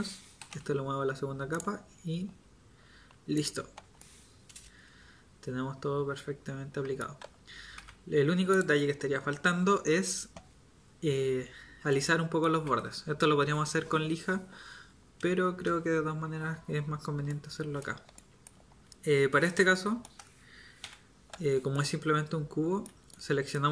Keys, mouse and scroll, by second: 0.4 m, 7.7 Tab, 12.7 Tab, 20.8 a.